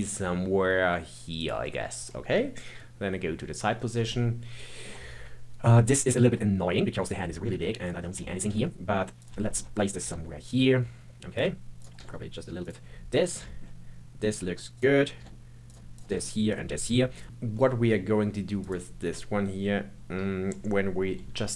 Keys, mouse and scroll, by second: 2.7 KP_3, 3.7-4.1 scroll up 2, 4.1-6.4 shift+middle drag, 6.6-7.8 scroll down 2, 7.8 click, 8.0 scroll up 4, 8.2 shift+middle click, 8.5 g, 9.5 shift+middle click, 9.8 click, 10.0 g, 11.8 click, 12.0 g, 13.3 scroll up 2, 13.4-14.7 shift+middle drag, 14.7 click, 15.1 g, 15.9 click, 16.1 g, 17.1 click, 17.6-18.6 middle drag, 18.6 click, 21.2 ctrl+KP_7.